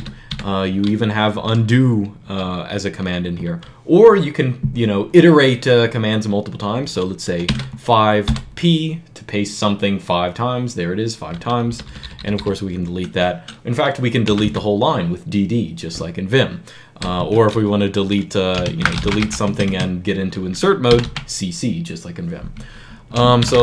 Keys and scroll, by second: 0.7 typing, 7.3 5, 8.1 p, 11.5 u, 11.8 u, 12.0 u, 12.2 u, 13.8-14.6 typing, 17.0 Escape, 18.2-21.2 typing, 23.0-23.6 typing.